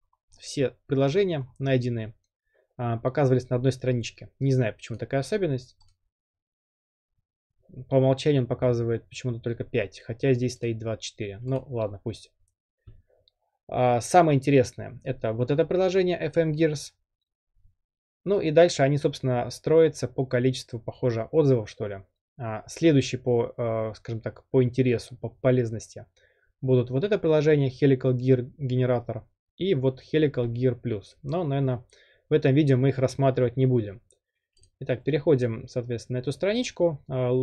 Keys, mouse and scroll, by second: 0.0-0.5 scroll, 1.5-2.6 scroll down 13, 2.6 scroll down 1, 3.6-5.0 scroll up 9, 5.0-5.9 drag, 10.7 click, 11.6 click, 34.6 click, 35.6 click.